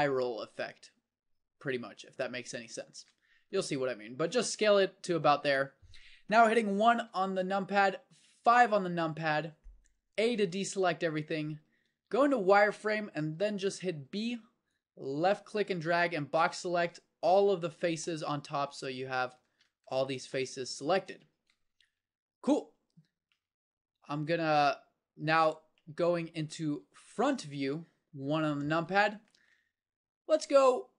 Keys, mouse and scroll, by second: 3.7 s, 7.1 KP_1, 8.6 KP_5, 10.3 a, 12.0 z, 13.3-15.3 middle drag, 14.1 b, 18.0-19.5 middle drag, 19.5 z, 22.0 KP_5, 22.7 KP_1, 23.8 KP_5, 25.3 KP_1, 26.0 KP_5, 28.3 KP_1.